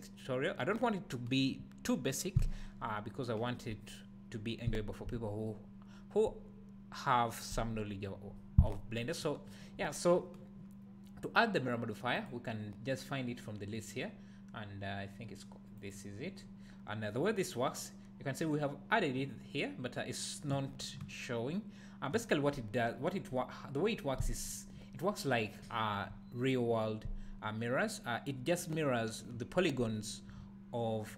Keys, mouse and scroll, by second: 12.2-21.8 drag, 16.6-18.3 scroll down 2, 18.3-20.3 scroll down 1, 20.3-20.7 scroll down 1, 21.0 `.